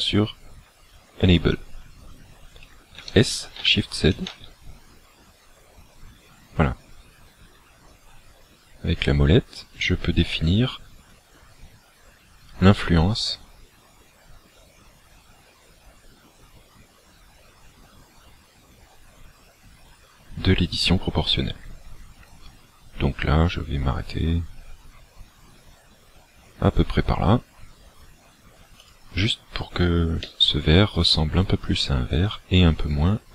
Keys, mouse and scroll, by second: 3.0 s, 28.9 click, 30.4 middle click.